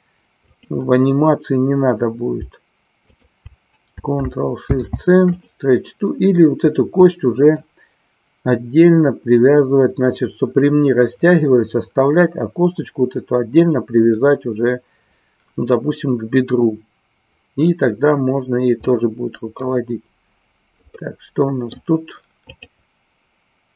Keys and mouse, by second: 0.4-1.8 drag, 3.2 shift+click, 5.5 ctrl+shift+c, 7.2 middle click, 18.9 middle click, 20.9 middle click.